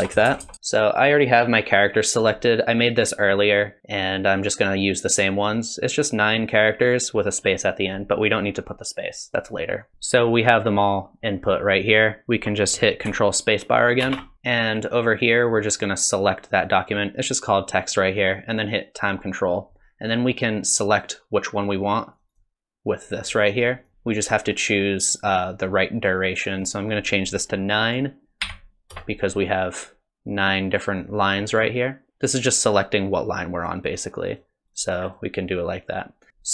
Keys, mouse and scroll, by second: 14.0 ctrl+space, 15.7 click, 19.0 click, 20.9 click, 21.6 click, 21.9 click, 22.1 click, 22.3-23.6 click, 23.2 click, 23.4 click, 23.8 click, 23.9 click, 26.5 click, 34.3 click, 34.7 click, 35.1 click, 35.5 click, 36.2 click.